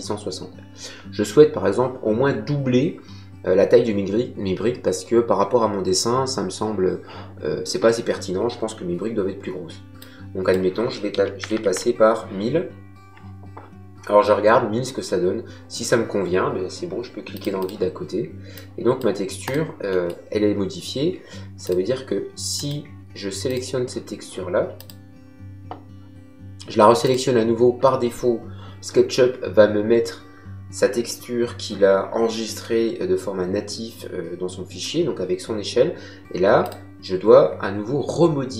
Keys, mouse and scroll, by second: 9.9 click, 11.1 KP_1, 11.4 KP_0, 17.3 click, 19.8 middle click, 21.6 click, 27.0 click, 32.6 middle click, 36.6 click.